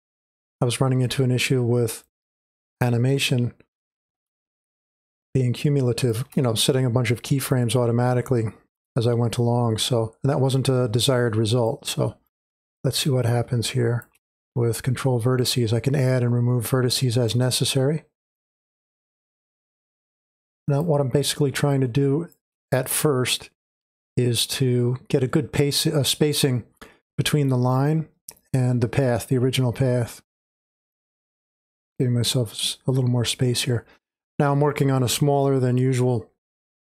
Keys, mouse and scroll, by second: 0.0-4.4 drag, 4.4 space, 4.7-12.1 drag, 12.1 space, 12.2-21.5 drag, 21.5 space, 21.7-28.1 drag, 22.1 space, 30.9-36.9 drag.